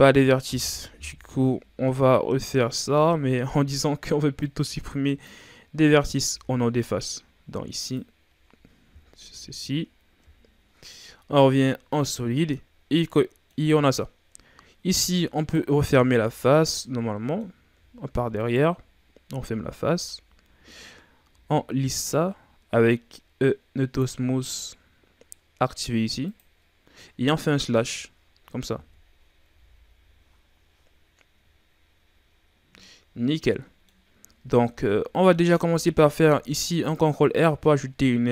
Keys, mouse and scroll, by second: 0.5 KP_3, 1.0 z, 1.8-2.2 scroll up 3, 2.6 right click, 2.8 b, 6.2 x, 8.9 z, 11.3 scroll down 1, 11.5 middle click, 11.9 scroll up 1, 12.2-12.9 scroll down 1, 12.9 scroll down 1, 13.1-14.4 middle drag, 14.4-15.3 scroll up 2, 15.3 alt+right click, 16.2 f, 16.6-18.4 middle drag, 18.4 alt+right click, 19.2 f, 19.8 Tab, 21.2 w, 23.8 click, 24.7-26.2 scroll down 5, 26.2 click, 27.5 KP_Divide, 28.8 KP_3, 29.4 a, 29.8-31.4 scroll down 5, 31.4 shift+scroll up 1, 32.3-33.2 scroll up 5, 33.2 ctrl+scroll down 1, 33.4-34.3 middle drag, 34.3 Tab, 34.8 scroll up 1, 34.8-36.1 middle drag, 36.1 ctrl+r.